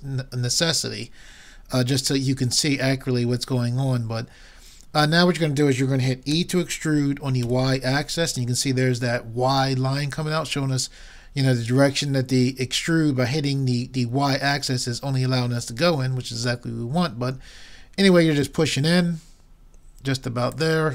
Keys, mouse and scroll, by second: 4.1-6.3 middle drag, 6.4 e.